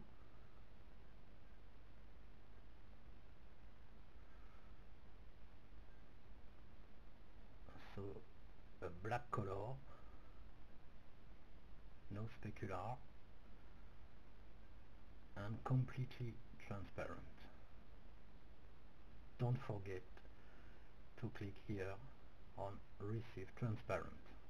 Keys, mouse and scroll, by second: 0.0-2.1 middle drag, 2.1 scroll up 1, 2.3-4.2 middle drag, 4.6-7.7 drag, 8.1 click, 8.7-11.1 drag, 12.5-14.7 drag, 13.5-16.8 middle drag, 15.9-19.5 drag, 19.5-21.9 middle drag, 22.2-24.4 drag.